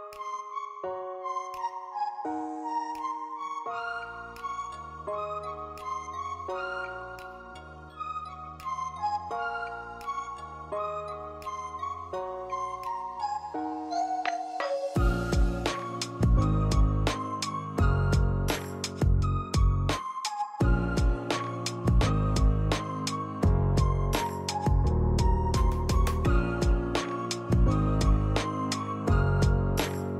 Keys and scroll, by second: 0.4-1.3 typing, 2.5-5.4 typing, 7.2-9.6 typing, 19.5-20.5 typing, 22.1 z, 27.3 p, 28.3 l.